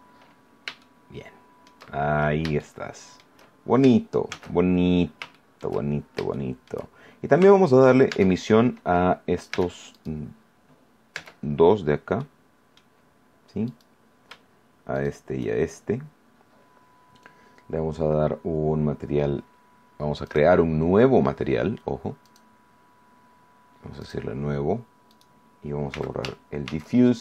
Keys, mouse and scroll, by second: 0.7-1.9 shift+middle drag, 1.9 shift+scroll up 2, 2.5 shift+middle click, 4.2 shift+z, 4.7-5.1 shift+scroll down 1, 5.3 shift+middle click, 6.3 shift+middle click, 6.9 shift+scroll up 1, 7.5 shift+middle click, 8.0 shift+Tab, 9.5 Tab, 9.9 right click, 11.1 Tab, 12.1 middle click, 13.6 right click, 14.9 shift+right click, 15.5 shift+scroll down 1, 20.2 click, 22.2 click, 23.9 click, 25.1 right click, 25.9 x, 26.6 shift+a.